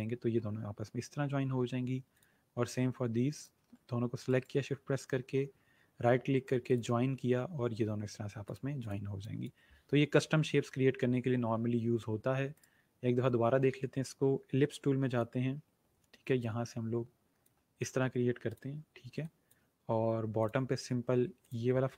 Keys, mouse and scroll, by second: 2.0 click, 4.2 right click, 6.5 click, 12.5 right click, 15.0-17.6 drag.